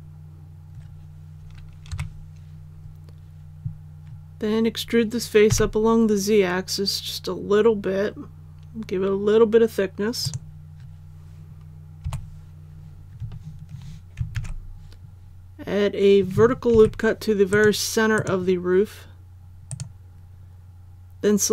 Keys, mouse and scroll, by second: 1.9 KP_1, 5.5 e, 10.2 click, 12.0 KP_7, 14.3 alt+a, 16.7 ctrl+r, 17.5 click, 19.7 right click.